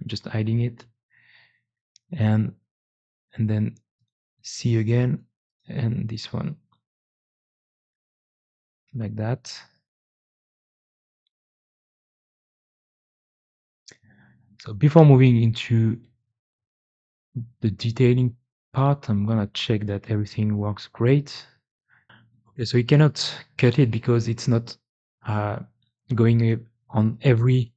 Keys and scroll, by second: 0.0 h, 4.2 g, 7.9 c, 7.9 x, 21.5 x, 22.0 alt+Tab, 25.7 1.